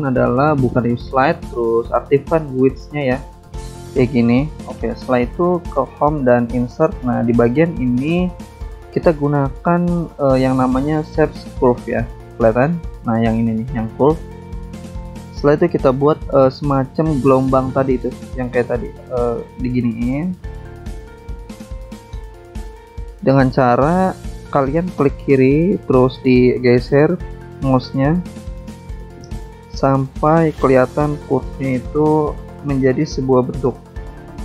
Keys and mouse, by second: 1.4 click, 2.3 click, 4.0 click, 4.6 click, 5.8 click, 6.7 click, 8.8 click, 9.6 click, 10.2 click, 10.3 double click, 13.6 click, 15.4 click, 16.2 click, 17.1 click, 18.0 click, 18.8 click, 19.9 click, 20.9 click, 22.5 click, 24.1 click, 25.1 click, 26.0 click, 27.2 click, 27.9 click, 28.9 click, 29.8 click, 30.7 click, 31.7 click, 32.5 click.